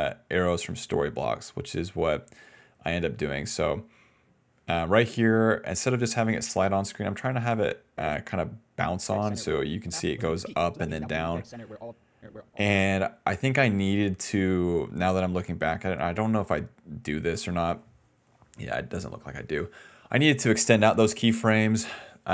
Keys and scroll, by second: 1.2 d, 9.0-11.8 typing, 13.0 s.